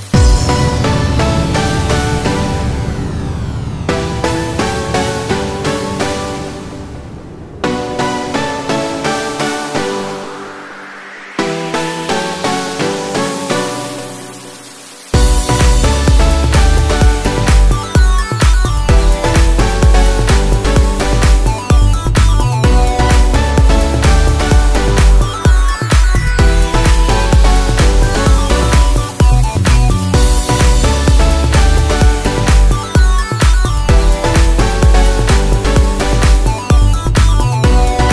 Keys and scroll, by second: 4.5 ctrl+a, 24.5 ctrl+-, 31.1 ctrl+a.